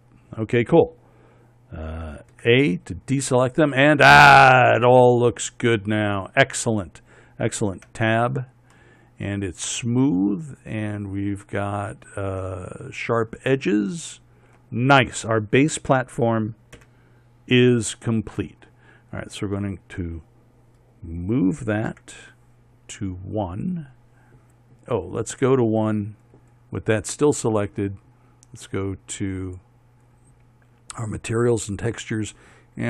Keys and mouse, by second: 2.9 a, 8.4 Tab, 14.2 middle click, 17.4 KP_1, 18.8 middle click, 22.5 m, 30.0-32.8 drag.